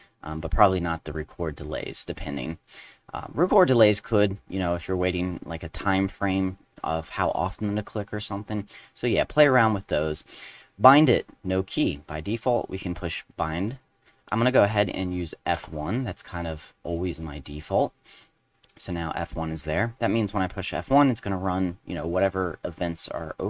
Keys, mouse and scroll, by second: 3.4 click, 4.0 click, 13.3 click, 15.5 F1.